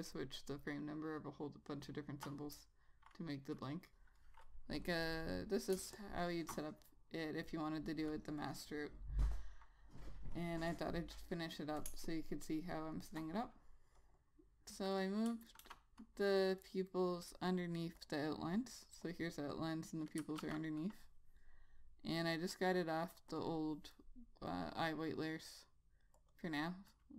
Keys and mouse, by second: 5.0 ctrl+s, 5.1 click, 6.0 space, 6.3 click, 6.5 space, 12.2 space, 12.4 click, 12.7 space, 14.3 click, 15.6 click, 15.9 ctrl+z, 18.3 click, 20.5 click, 20.7 ctrl+z, 23.6 click.